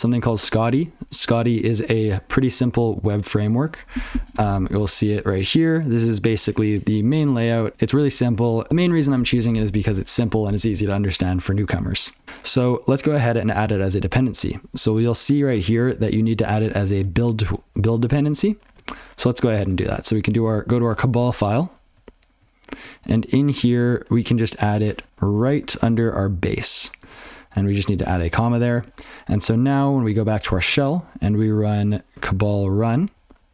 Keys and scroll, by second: 12.1 alt+x.